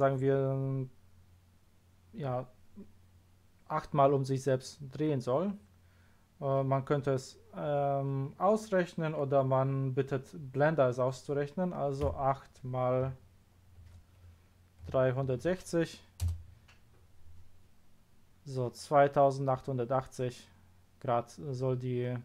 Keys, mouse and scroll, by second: 12.0 KP_8, 14.8 3, 15.2 6, 15.4 0, 16.2 Return.